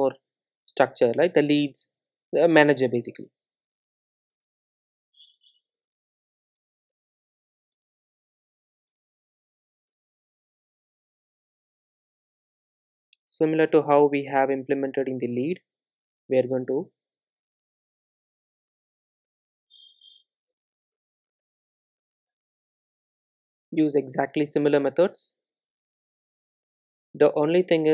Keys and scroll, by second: 3.0 alt+Return, 8.1 alt+Return, 21.8 super+c, 23.2 super+e, 26.6 super+v.